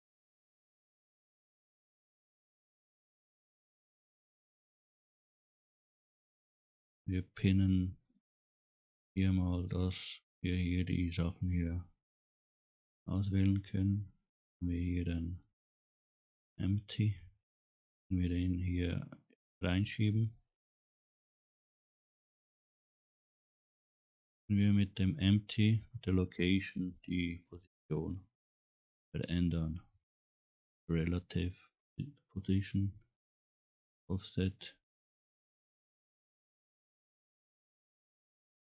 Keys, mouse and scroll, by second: 2.1 click, 8.2 click, 12.9 click, 22.8 click, 23.9 scroll up 1, 25.7 middle click, 26.7 click, 36.5 middle click, 36.5 scroll down 1.